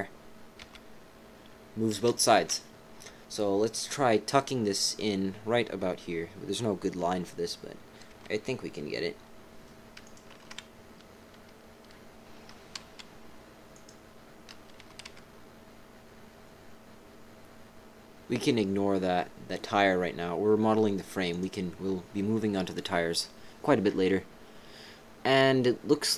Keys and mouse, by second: 0.6 g, 2.4 ctrl+z, 8.1 g, 10.4 ctrl+z, 12.4 g, 14.8 g.